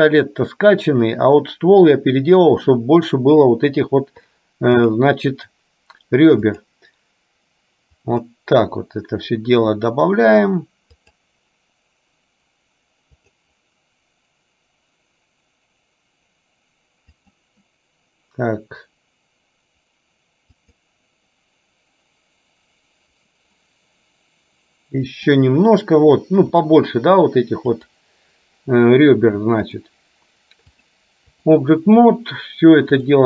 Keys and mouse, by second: 4.9 click, 6.7 click, 8.2 click, 11.0 click, 13.3 click, 17.3 click, 20.8 click, 23.3 click, 25.2 click, 27.9 click, 29.8 click, 30.9 click.